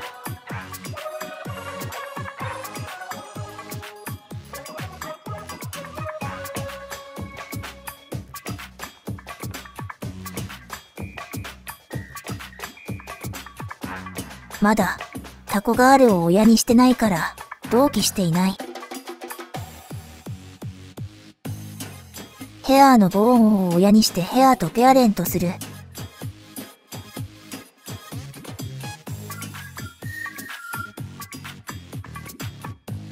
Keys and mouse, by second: 0.2-1.2 drag, 1.6 ctrl+z, 2.5 click, 3.4 ctrl+z, 4.0 click, 4.9 click, 5.9 click, 6.8 click, 7.7 click, 10.2 click, 12.3 click, 12.8 click, 14.1-16.8 drag, 17.2 ctrl+z, 18.9 shift+middle click, 19.8-22.0 middle drag, 25.0 click, 29.6 click.